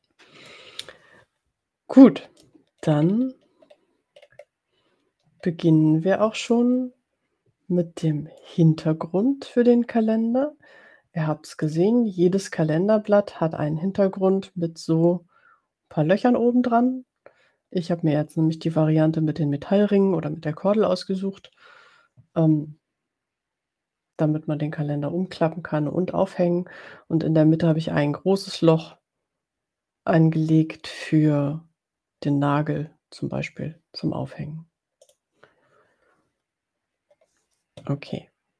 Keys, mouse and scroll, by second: 0.4-2.6 drag, 2.9-3.9 ctrl+scroll up 5, 4.5 ctrl+scroll up 2, 6.7-7.0 drag, 7.0-8.8 middle drag, 11.8 click, 35.0 click.